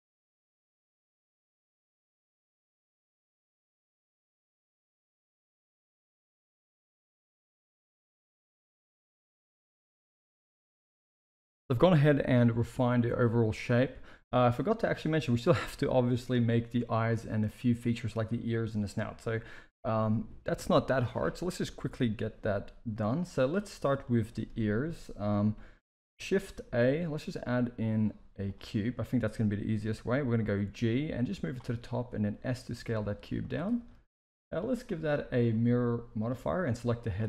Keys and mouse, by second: 0.1 s, 2.0 click, 2.4 g, 2.9 click, 3.2 click, 3.4 g, 3.9 Tab, 4.5 KP_1, 4.7 middle drag, 5.0 alt+a, 5.1 middle click, 5.2 z, 5.4 middle drag, 5.7 KP_1, 5.9 shift+middle click, 6.4-7.4 middle drag, 7.5 KP_1, 7.7 shift+middle drag, 9.3 alt+a, 10.9 shift+middle click, 24.0-24.4 middle drag, 25.2 KP_1, 26.6 shift+a, 30.3 g, 31.9 s, 33.7 shift+middle drag, 34.5-35.3 drag, 36.1 click.